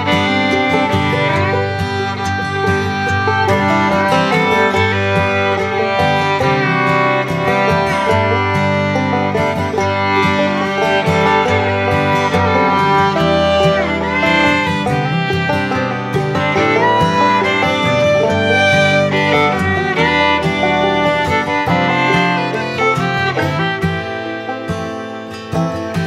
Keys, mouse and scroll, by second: 0.2-3.6 drag, 5.0 ctrl+z, 5.7 click, 9.7-22.5 drag, 22.7-26.0 drag.